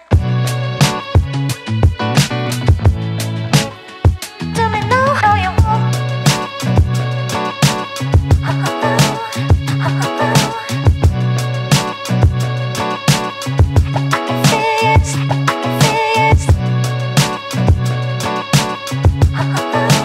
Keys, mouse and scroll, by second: 0.6 alt+middle drag, 0.8 alt+click, 1.5 alt+right click, 1.6 alt+middle click, 1.7 alt+right click, 2.0 alt+middle click, 2.4 alt+right drag, 2.6 Tab, 2.8 click, 3.4 click, 3.6 click, 4.5 click, 7.1 Tab, 7.3 click, 8.7 Tab, 9.0 1, 9.1 click, 9.7 click, 10.3 Tab, 10.5 Tab, 10.6 click, 10.9 click, 11.5 click, 11.8 1, 11.9 click, 12.2 shift+click, 12.4 f, 12.7 click, 12.9 click, 13.4 click, 14.0 ctrl+z, 14.1 ctrl+z, 14.5 click, 14.7 click, 15.0 alt+click, 15.1 alt+middle click, 15.3 alt+right click, 15.6 click, 16.0 click, 16.3 3, 16.5 click, 16.6 alt+click, 16.8 alt+middle click, 17.3 1, 17.4 click, 18.4 click, 18.8-20.0 alt+right drag.